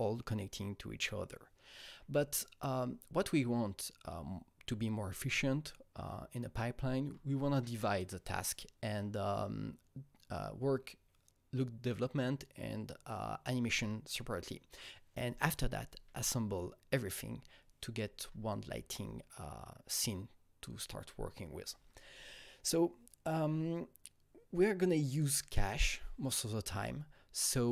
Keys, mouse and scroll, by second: 6.9-21.7 Right, 23.3 Right, 26.7 Right.